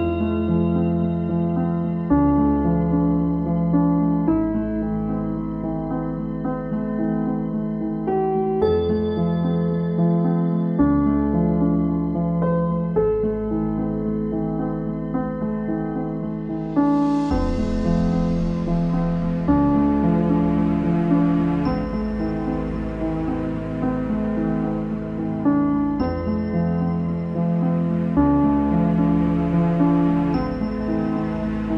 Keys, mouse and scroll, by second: 0.2-2.6 right drag, 2.6-7.5 drag, 8.7 shift+click, 10.1 ctrl+l, 10.9 click, 11.5 right click, 11.9 click, 12.1-14.2 middle drag, 14.2 scroll down 1, 14.5-15.5 shift+middle drag, 15.5 click, 16.4 right click, 17.8 click, 18.3-19.1 scroll up 2, 19.1-23.9 drag, 23.9 middle click, 24.5 click, 24.8-25.6 scroll down 8, 25.6-26.8 shift+middle drag, 26.8 click, 29.9 shift+click, 31.5 ctrl+l.